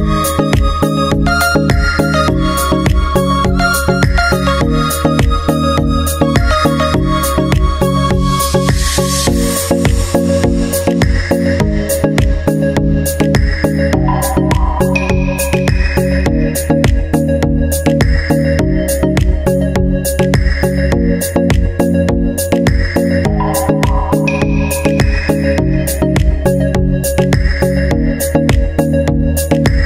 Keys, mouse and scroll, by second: 0.0-1.0 drag, 1.9-4.1 drag, 4.1 middle click, 4.7-6.6 drag, 6.6 middle click, 7.0-9.6 drag, 9.7-10.7 drag, 11.7-12.8 drag, 15.3-18.0 drag, 18.5 middle click, 18.9-22.3 drag, 22.6-23.6 drag, 24.5 click, 25.7-28.7 drag, 29.6-29.8 drag.